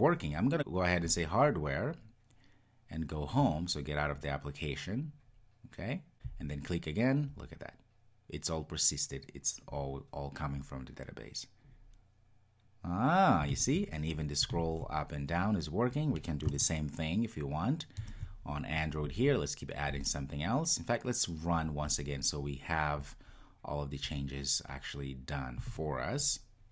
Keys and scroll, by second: 25.7 ctrl+r.